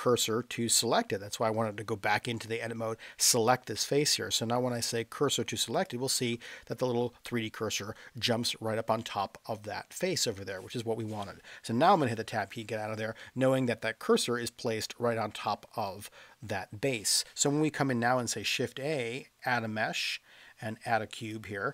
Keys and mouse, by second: 11.9 Tab, 13.3-15.5 middle drag, 15.8 middle click, 18.4 shift+a.